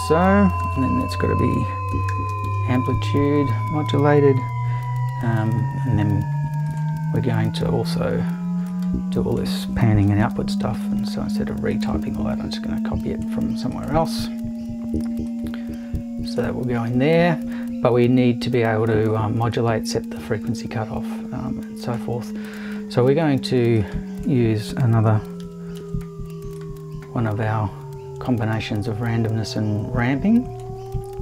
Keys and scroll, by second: 0.7 super+i, 2.1 shift+8, 2.4 shift+`, 10.2 super+c, 10.7 super+v, 25.4 super+c, 25.8 super+v.